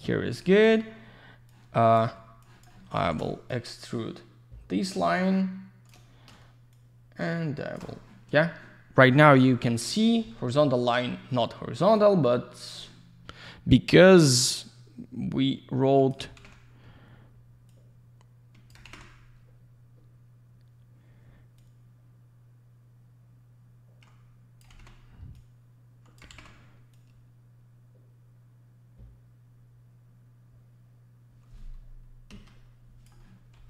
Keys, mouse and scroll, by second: 0.4 click, 1.5 click, 2.4 alt+click, 3.5 shift+click, 6.7 shift+click, 9.3 click, 11.8 click, 12.5 click, 14.6 click, 16.4 ctrl+z, 17.7 click, 18.8 ctrl+z, 21.5 click, 24.7 ctrl+z, 25.3 click, 26.3 ctrl+z, 26.9 click, 32.3 Escape, 33.5 ctrl+z.